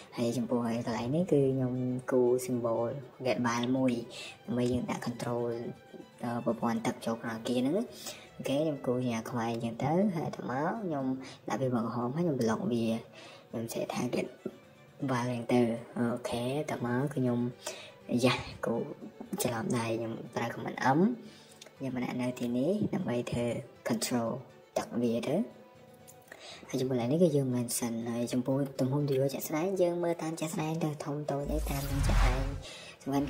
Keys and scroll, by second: 1.2 Escape, 1.4-2.4 typing, 4.4 space, 6.2 Escape, 8.8 Escape, 9.9-14.1 typing, 14.8 Escape, 15.5-16.9 typing, 16.9 Escape, 21.2 Escape, 21.4 Escape, 22.4 Escape, 24.9 Escape, 25.6 Escape, 26.4 ctrl+a, 26.9-33.2 typing.